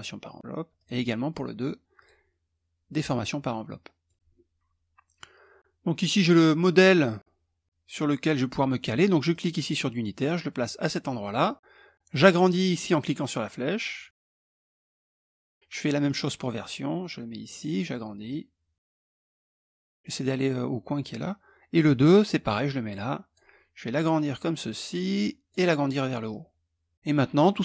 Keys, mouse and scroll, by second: 0.4 click, 1.5 click, 2.5 click, 3.2 middle click, 8.9-11.1 drag, 12.5-14.4 drag, 14.6 click, 15.6-17.5 drag, 17.8-19.6 drag, 21.3-23.1 drag, 23.5-25.3 drag, 25.8-26.9 drag.